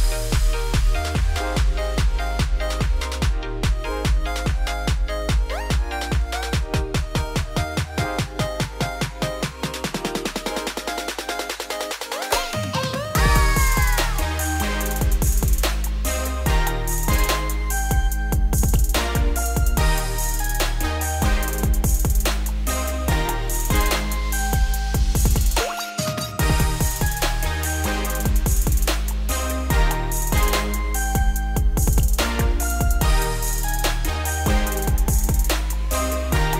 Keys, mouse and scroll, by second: 1.0 shift+s, 2.1 Tab, 4.6-5.4 scroll up 1, 5.4 click, 5.9-6.6 scroll down 2, 6.6 shift+d, 7.3 g, 8.4 `, 8.9 z, 9.3 scroll up 5, 9.5 Tab, 9.9 a, 10.4 shift+middle click, 10.9 s, 12.6 s, 18.3 shift+middle click, 18.7 g, 21.9 scroll up 1, 22.1 g, 24.0 scroll down 2, 24.7-26.2 scroll down 2, 26.2 Tab, 26.7 scroll up 1, 26.8 Tab, 28.6 Tab, 29.7 shift+click, 30.2 shift+click, 30.9 ctrl+click, 31.7 ctrl+drag, 32.2 Tab, 32.7 a, 33.0-33.8 scroll up 2, 33.8 ., 35.4 s.